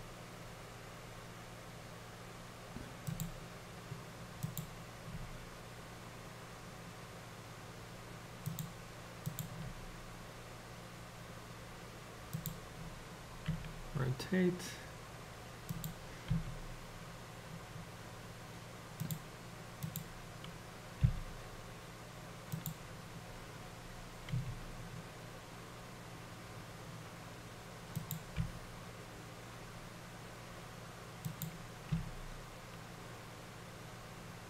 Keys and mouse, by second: 4.5 click, 5.4 g, 9.4 click, 9.8 g, 13.5 r, 16.4 s, 19.9-21.3 drag, 21.3 g, 24.3 s, 28.5 r, 32.1 g.